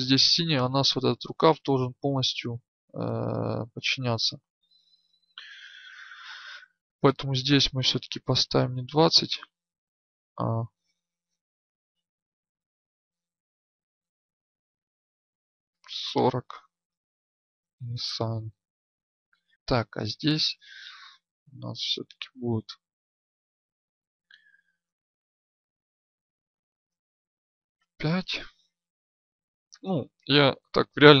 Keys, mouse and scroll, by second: 6.1 Tab, 18.5 Tab, 20.7 Tab, 22.5 right click, 31.1 Tab.